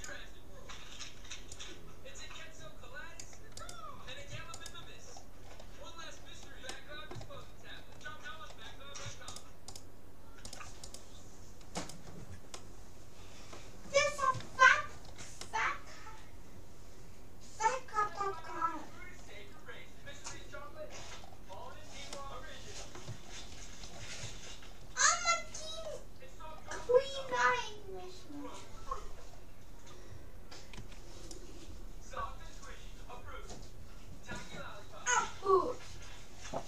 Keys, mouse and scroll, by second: 4.6-6.2 right drag, 5.2-10.6 middle drag, 9.4-13.4 right drag, 12.6-17.2 middle drag, 18.4-25.0 middle drag, 25.4-26.7 middle drag, 27.2-31.2 middle drag, 30.8 c.